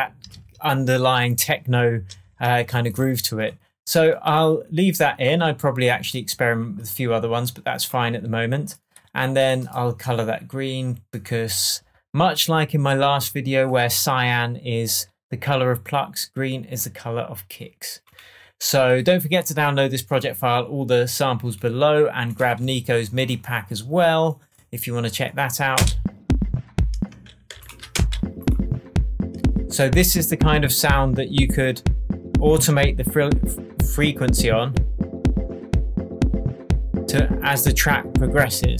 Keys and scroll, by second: 0.2 super+space, 0.3 super+s, 22.5 Down, 25.7 space, 27.0 space, 28.8 space.